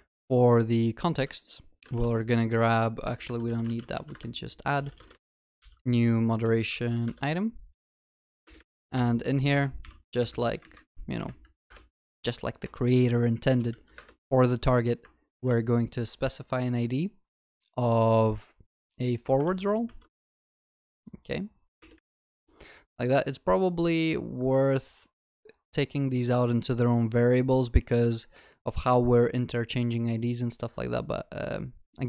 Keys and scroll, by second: 3.1 ctrl+BackSpace, 4.1 Return, 14.0 Return, 19.5 ctrl+w, 20.2 ctrl+c, 22.1 ctrl+v.